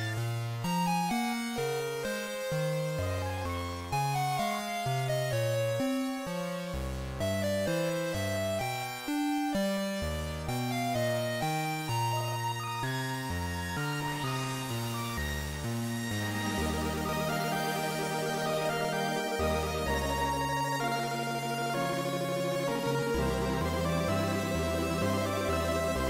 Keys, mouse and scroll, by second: 0.2-1.8 scroll down 6, 2.1 shift+a, 9.5-10.1 scroll up 3, 10.7-11.8 scroll up 1, 15.3 click, 18.9 click, 22.0 right click, 23.7-24.1 scroll up 1, 24.9 shift+right click.